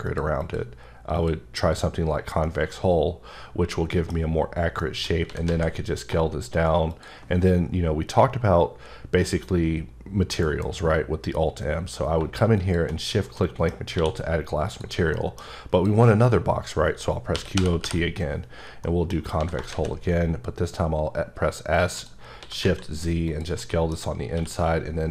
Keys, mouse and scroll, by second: 0.1 click, 0.4 click, 1.1 click, 2.4 middle click, 4.8 middle click, 5.3 s, 5.5 z, 6.9 click, 10.4 alt+m, 12.6 click, 13.4 middle click, 13.9 q, 14.7 click, 15.1 middle click, 15.7 click, 17.3-17.8 typing, 18.8 middle click, 19.4 s, 19.7 z, 21.9 click, 22.4 s, 22.6 z, 23.3 click, 23.6 middle click, 24.3 q.